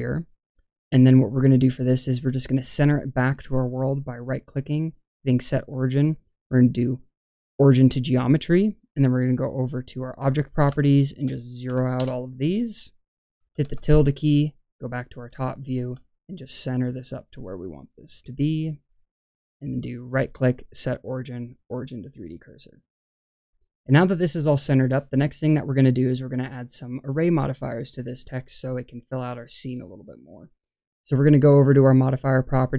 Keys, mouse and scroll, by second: 0.0 middle click, 3.5-9.9 right drag, 9.9-10.6 drag, 10.7-11.9 shift+drag, 15.4-15.8 shift+middle drag, 16.8 click, 17.7 click, 20.0-21.5 right drag, 31.9-32.7 drag.